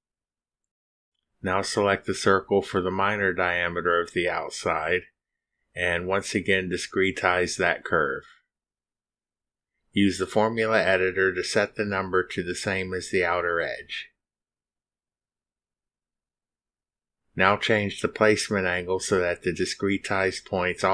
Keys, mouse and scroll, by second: 1.9 click, 5.7 click, 7.7 middle click, 8.6 click, 12.3 click, 13.4 click, 13.9-16.3 typing, 14.9 Down, 16.3 Down, 16.6 Return, 19.1 click.